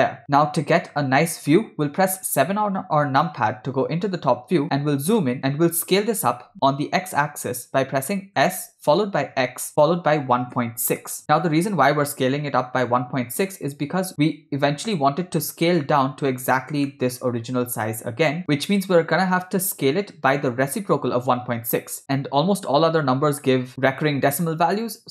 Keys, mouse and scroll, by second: 0.2 middle click, 2.4 KP_7, 4.6-5.7 ctrl+middle drag, 8.5 s, 14.1 shift+middle click, 16.9 shift+middle click, 23.5 shift+middle click, 24.8 shift+middle click.